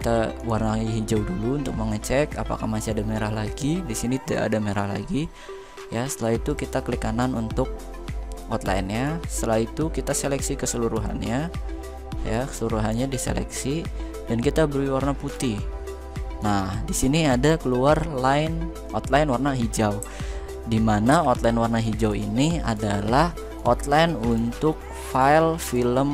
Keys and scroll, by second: 20.8 ctrl+f.